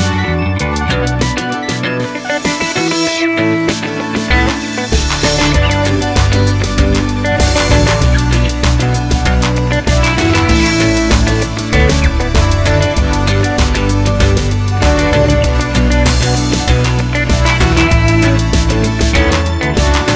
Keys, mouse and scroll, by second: 0.2 middle click, 1.1 Tab, 4.1 middle click, 4.6 KP_7, 4.9 z, 5.1-5.4 scroll down 1, 5.4 scroll up 1, 5.6 Tab, 6.4 click, 7.1 z, 7.3-8.9 scroll up 1, 8.9 click, 9.6 3, 9.7 click, 10.4 shift+click, 17.0 click, 17.5 shift+click, 18.1 shift+d, 18.5 Return, 18.7 Tab, 19.1 click, 19.4 Tab, 19.8 click.